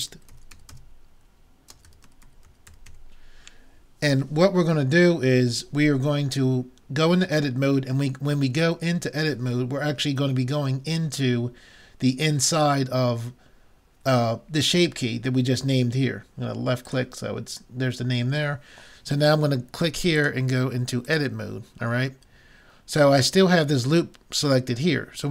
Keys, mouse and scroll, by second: 21.1 click.